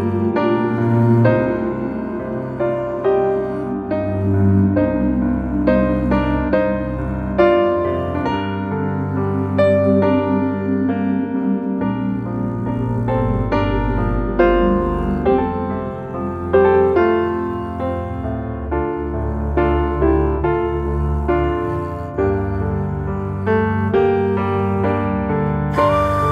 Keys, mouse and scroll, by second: 2.1-3.0 scroll up 1, 3.0 g, 7.8 alt+middle drag, 8.5 s, 12.6-14.1 middle drag, 14.1 s, 16.1-17.0 middle drag, 17.0 Tab, 17.3 click, 18.0 e.